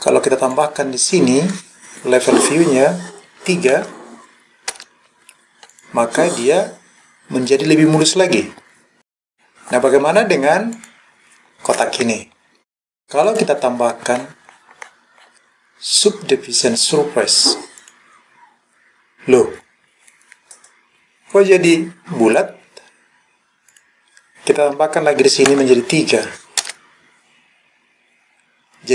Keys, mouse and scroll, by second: 0.6-4.8 drag, 5.7 click, 6.4-7.0 scroll up 1, 7.0-7.8 scroll down 1, 9.0 click, 9.2-9.6 scroll down 1, 9.6-10.2 scroll up 1, 10.8 click, 13.3-17.9 drag, 23.7-26.7 drag.